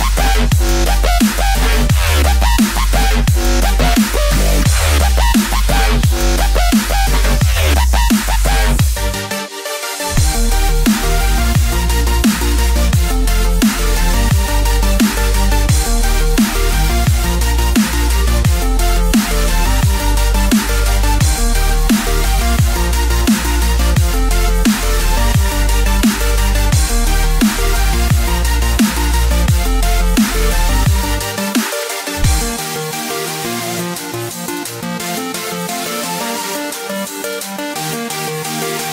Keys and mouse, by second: 0.7 KP_5, 1.6 KP_1, 3.4 KP_2, 4.8 KP_3, 7.9 click, 10.5 KP_7, 11.9 click, 18.4 KP_3, 21.7 click, 23.6 shift+a, 30.8 s.